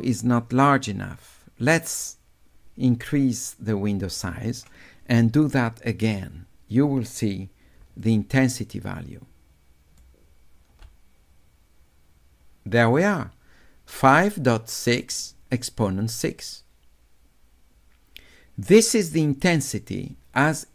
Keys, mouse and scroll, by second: 0.7-4.6 drag, 8.1 click, 9.0-10.0 right drag.